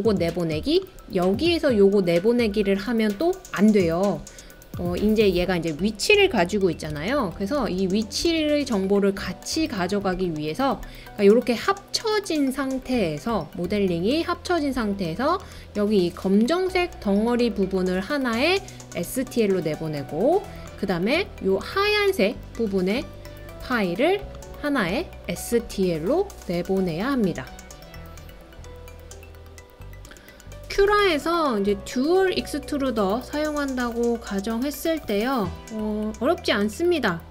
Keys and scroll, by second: 7.2 super+z, 7.6 super+z, 8.2 super+z.